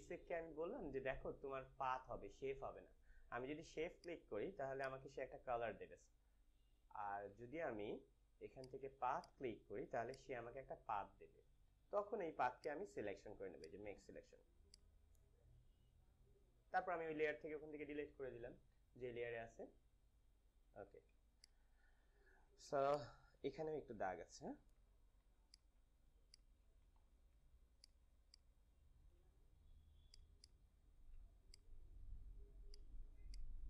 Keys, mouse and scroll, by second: 3.9-7.5 drag, 7.2 z, 8.4-12.6 drag, 12.5 right click, 12.6 right click, 13.5 click, 16.8 click, 20.2 click, 20.6 ctrl+d, 21.1 space, 21.4 click, 21.6 space, 22.8 click, 23.2 space, 24.5 ctrl+=, 25.1 space, 25.4 click, 25.7 space, 26.2 click, 26.3 click, 26.4 space, 26.8 s, 27.7-30.0 alt+drag, 30.0-31.1 alt+drag, 31.8-33.6 alt+drag.